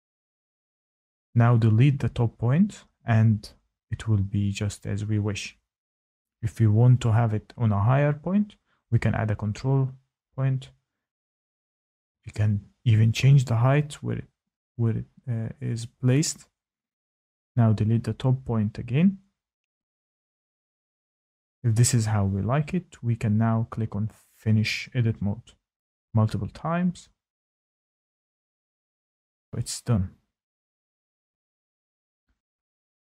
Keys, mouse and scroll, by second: 0.3 click, 0.5 click, 1.4 click, 4.4 right click, 4.8 ctrl+z, 6.1 click, 7.1 click, 8.5 click, 12.2 click, 14.9 shift+middle click, 20.8 shift+middle click, 22.1 shift+middle click, 28.1 click, 28.1 scroll, 28.6 middle click, 29.6 scroll, 29.7 middle click, 31.7 shift+middle click, 32.0 shift+click.